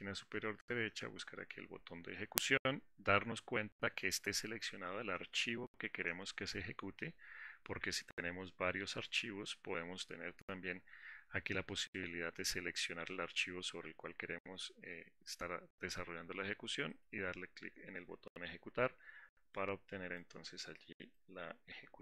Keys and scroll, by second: 17.2 shift+F10.